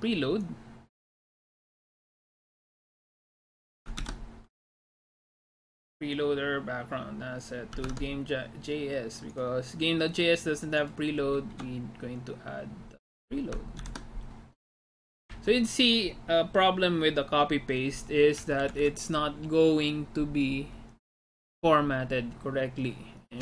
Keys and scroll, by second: 4.1 ctrl+c, 8.0 alt+Tab, 11.7 Return, 13.9 ctrl+v, 15.3 Return, 18.7 Up, 18.9 Up.